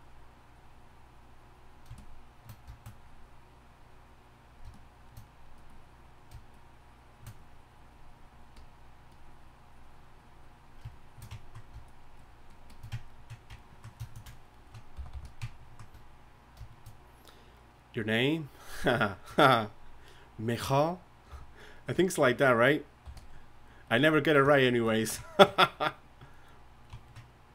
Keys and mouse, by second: 11.4-14.8 drag, 15.1 g, 15.5 g, 15.6 f, 21.3 f, 23.0 f.